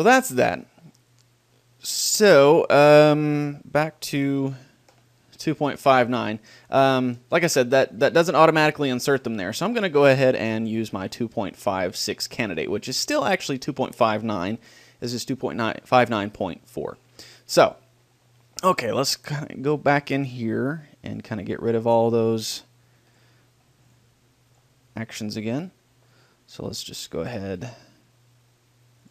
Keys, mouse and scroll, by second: 6.2-8.4 middle drag, 8.4-10.4 drag, 19.3-23.5 drag, 23.9-25.6 drag, 26.2-29.1 middle drag.